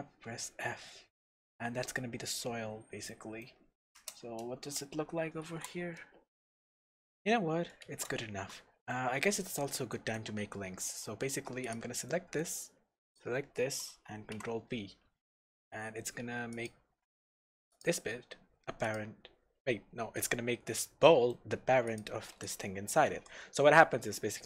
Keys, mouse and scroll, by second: 0.3-0.6 scroll down 1, 0.6 scroll up 1, 1.3-1.6 scroll down 1, 2.7 scroll up 1, 3.1-7.2 middle drag, 4.0 KP_0, 4.6 scroll up 1, 4.9 alt+a, 5.5 shift+z, 8.9 middle click, 9.9 shift+middle click, 10.4 scroll up 1, 11.0 shift+middle click, 11.6 click, 12.1-13.0 middle drag, 13.0 shift+click, 14.3 ctrl+p, 17.2-17.7 shift+middle drag, 17.7 click, 18.8 click, 21.0-21.9 middle drag, 21.9 click, 22.5 drag, 23.1 g.